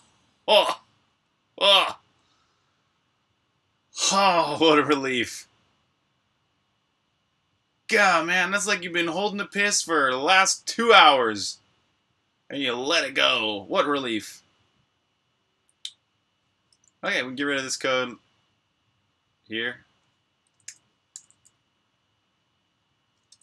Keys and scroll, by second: 20.5 BackSpace, 20.9 super+s, 23.2 super+Tab.